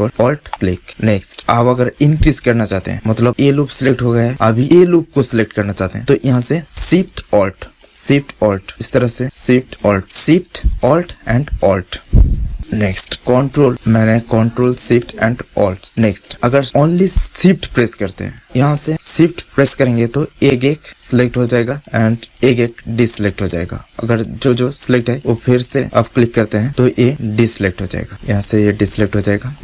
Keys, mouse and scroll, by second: 0.4-2.1 drag, 0.8-2.1 right drag, 7.6-10.6 drag, 11.7 click, 12.1 middle click, 12.5-13.6 right drag, 13.6-15.1 drag, 15.1 middle click, 15.8 click, 16.5-18.4 middle drag, 18.4 click, 18.9 middle click, 19.0 click, 19.4 right click, 20.3-27.1 drag, 25.8 right click, 27.4-29.6 drag.